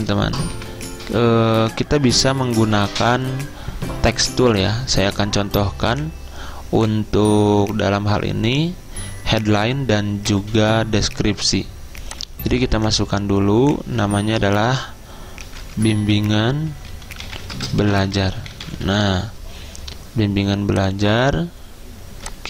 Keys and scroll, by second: 15.5-19.2 typing.